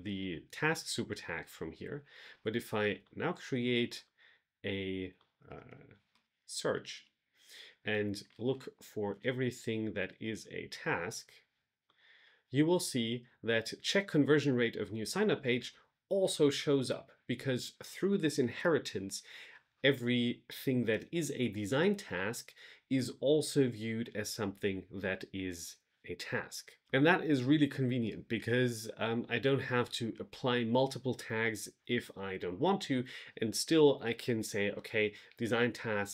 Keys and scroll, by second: 6.0 shift+/, 6.5 Right, 6.8 Return, 7.9 shift+3.